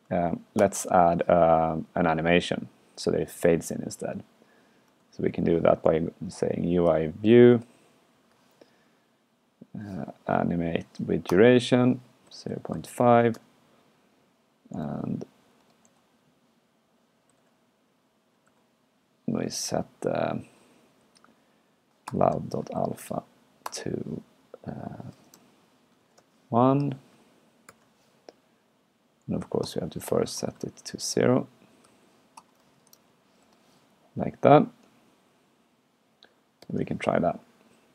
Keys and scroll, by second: 0.0 super+Right, 5.0 alt+8, 17.3 alt+shift+9, 18.5 alt+shift+8, 27.7 alt+shift+9.